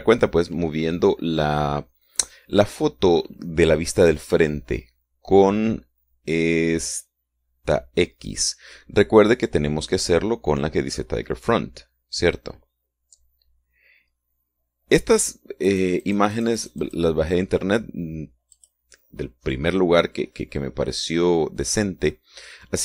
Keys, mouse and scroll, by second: 16.7 click, 19.5 click.